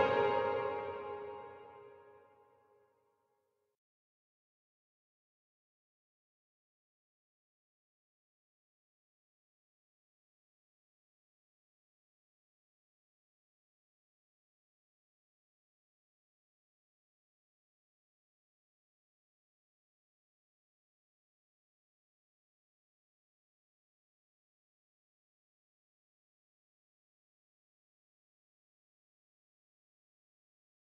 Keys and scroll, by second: 11.4 ctrl+b.